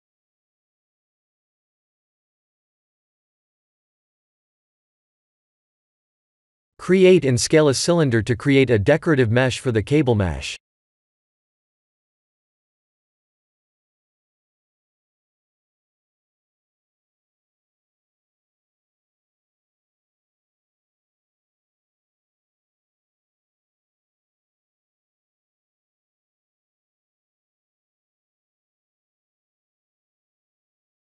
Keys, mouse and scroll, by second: 3.1 ctrl+z, 3.6 shift+a, 6.0-6.6 scroll down 1, 6.6 scroll down 4, 6.8 ctrl+z, 7.1 shift+a, 11.2 r, 14.4 s, 17.0 click, 18.5-20.0 scroll up 6, 21.1 s, 23.7 click, 24.9 click, 26.5 click, 27.8 r, 28.9 g.